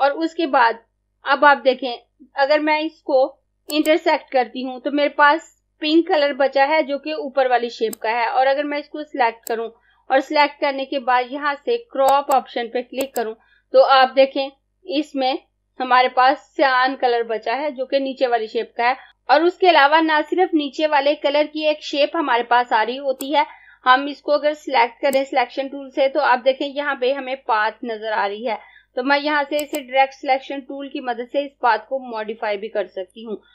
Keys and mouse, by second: 3.8 click, 8.0 click, 12.2 click, 23.3 click, 29.6 click.